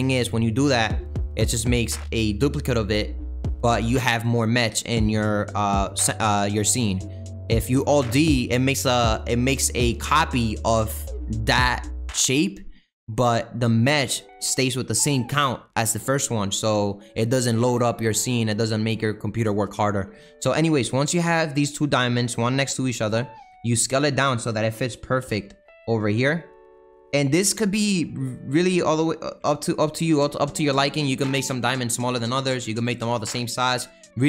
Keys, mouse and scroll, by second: 21.8 shift+click, 23.1 s, 25.2 g, 27.2 s, 29.4 g.